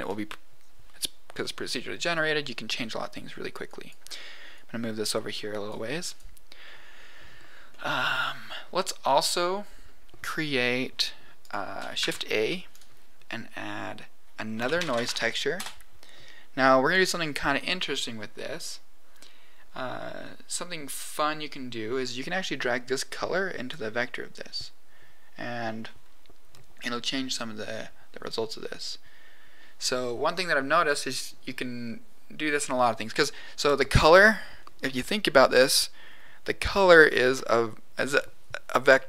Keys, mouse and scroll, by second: 3.6 click, 4.5 click, 5.0 click, 6.0 click, 6.9-7.6 scroll down 2, 7.6 middle click, 9.1 middle click, 10.6 middle click, 11.4 click, 11.9 shift+a, 22.7-23.7 drag.